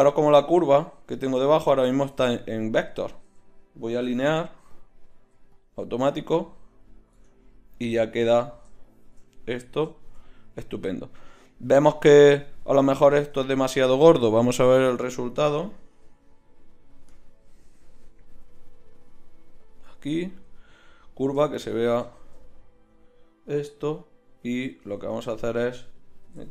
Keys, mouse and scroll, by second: 0.4-2.1 right drag, 1.5 z, 2.1 Tab, 2.9 a, 3.2 a, 4.0 v, 5.1 v, 6.2 right click, 7.1 Tab, 12.3-14.4 drag, 12.9 Tab, 19.7-21.4 drag, 24.8 s, 26.2 g.